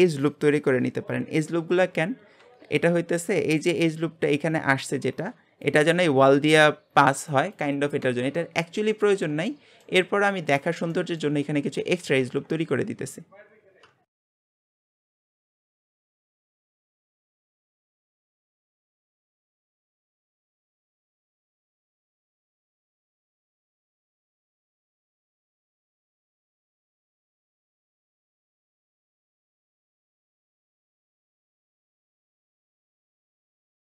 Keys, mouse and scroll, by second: 1.7 scroll up 2, 9.0-10.1 middle drag, 10.1-10.5 scroll down 4, 10.5 scroll up 2, 10.9 shift+middle click, 11.5 scroll up 1, 12.2 ctrl+r, 14.6 scroll down 1, 14.7 shift+middle click, 14.9 Tab, 15.0 click, 15.1 Tab, 15.2 shift+middle click, 15.5 scroll up 1, 15.7 shift+middle click, 15.9 click, 16.3 shift+middle click, 16.5 ctrl+r, 16.8 shift+middle click, 17.1 click, 17.4 ctrl+r, 17.8 click, 18.2 ctrl+r, 18.4 shift+middle click, 18.6 click, 19.0 ctrl+r, 19.3 click, 19.6 shift+middle click, 19.8 ctrl+r, 20.1 click, 20.4 ctrl+r, 21.0-22.0 shift+middle drag, 22.0 ctrl+r, 22.3 click, 22.7 ctrl+r, 23.0 click, 23.4 shift+middle click, 23.6 ctrl+r, 23.9 click, 24.2 ctrl+r, 24.5 click, 24.8 shift+middle click, 25.1 ctrl+r, 25.3 click, 25.6 ctrl+r, 25.9 click, 26.2 shift+middle click, 26.4 ctrl+r, 26.7 click, 27.1 ctrl+r, 27.4 click, 27.7 shift+middle click, 27.9 scroll up 1, 28.1 ctrl+r, 28.4 click, 28.8 ctrl+r, 29.0 ctrl+z, 29.2 ctrl+r, 29.5 click, 29.8 shift+middle click, 30.1 ctrl+r, 32.0 shift+middle click, 32.3 alt+shift+click, 32.6 click, 33.3 alt+shift+click, 33.8 shift+middle click.